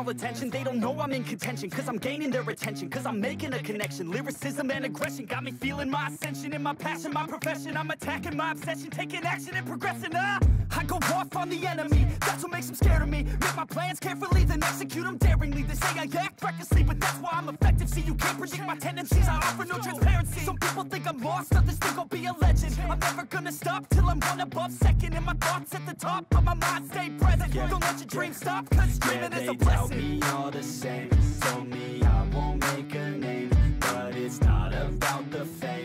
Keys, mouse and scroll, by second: 12.5 right click, 26.0-28.8 typing, 30.4 1, 34.7-35.3 typing.